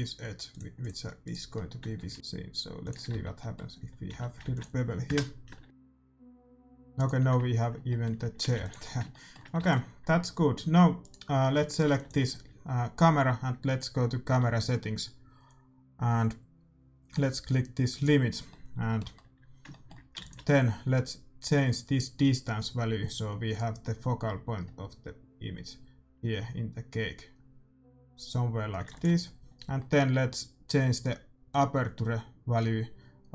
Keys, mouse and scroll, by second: 0.0-2.1 right drag, 2.0 ctrl+b, 3.2 Tab, 3.2 middle click, 3.8 a, 4.2 a, 4.5 ctrl+s, 5.1 KP_0, 5.6 g, 7.9-9.2 middle drag, 8.4 a, 8.6 ctrl+s, 9.7 ctrl+s, 11.0-12.9 right drag, 12.0 ctrl+s, 17.9-19.9 drag, 18.6-21.6 middle drag, 20.3 ctrl+s, 21.6-23.4 drag, 29.0 ctrl+s, 31.6-33.3 drag.